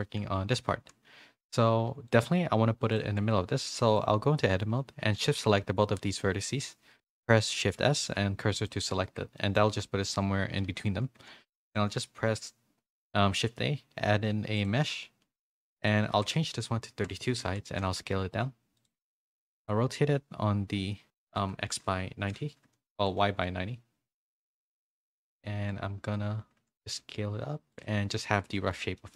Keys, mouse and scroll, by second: 0.8 z, 1.4 Tab, 1.8 1, 2.1-3.7 drag, 3.7 middle click, 7.6 shift+s, 9.0 Tab, 9.4 middle click, 10.6 KP_3, 11.5 shift+a, 15.7-17.1 drag, 18.7 s, 18.8 r, 23.1 s, 24.9 z, 27.0 s, 27.8 z, 28.3 middle click, 28.9 shift+middle click.